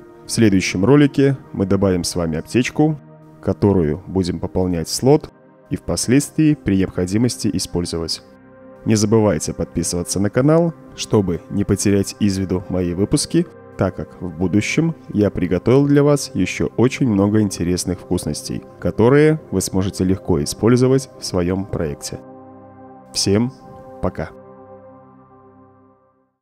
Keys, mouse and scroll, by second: 1.0 Escape.